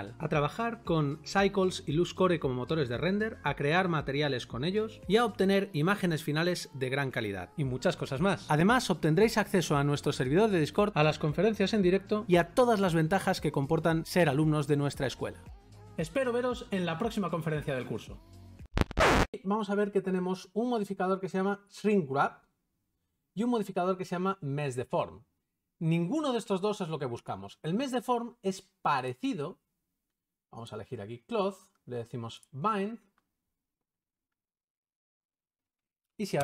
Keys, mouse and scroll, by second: 0.1 shift+middle click.